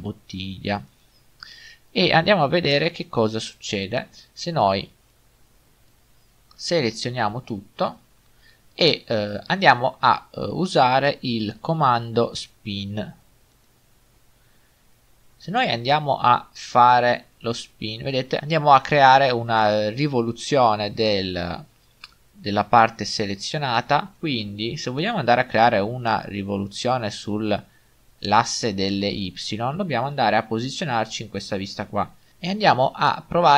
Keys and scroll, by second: 1.6-2.3 typing, 7.0 a, 24.2 ctrl+z.